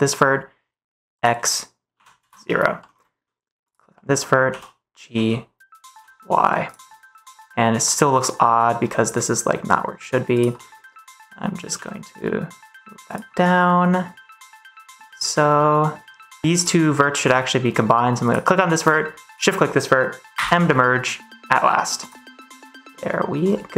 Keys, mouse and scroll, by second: 1.1-2.1 drag, 2.7 middle click, 3.8 middle click, 4.4 g, 5.0 z, 5.8 y, 6.5 click, 6.8 click, 7.4 click, 8.3 middle click, 8.7 g, 10.2 click, 10.4-11.5 middle drag, 11.6 g, 13.2-16.1 middle drag, 16.4 middle click, 16.4 g, 17.2 middle click, 20.2 m, 22.4 middle click, 23.6-23.7 middle drag.